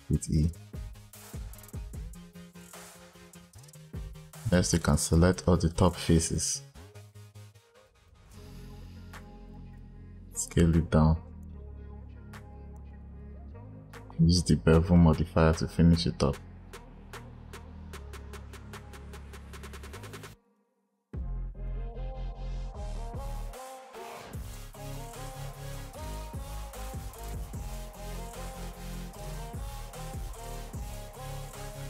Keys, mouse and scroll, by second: 0.0 e, 1.9 click, 2.9 click, 3.8 click, 4.5-5.6 drag, 7.0 shift+click, 7.2 shift+click, 7.4 shift+click, 7.7 shift+click, 7.9 shift+click, 8.1 shift+click, 8.4 shift+click, 8.7 shift+click, 9.1 shift+click, 9.4 shift+click, 9.6 shift+click, 10.3 s, 12.7 click, 14.0 click, 18.1-20.3 drag, 20.4 click, 21.1-21.6 scroll down 1, 21.6 click, 22.1 scroll down 1, 22.3 scroll up 8, 22.7 scroll down 2, 23.5 click, 24.8-26.0 drag, 26.2 scroll up 4, 26.5 click, 27.5 click, 28.0 click, 28.3 click, 28.5 s, 29.6 ctrl+z, 29.7 ctrl+z, 30.1 click, 30.4 click, 30.7 click, 31.2 click.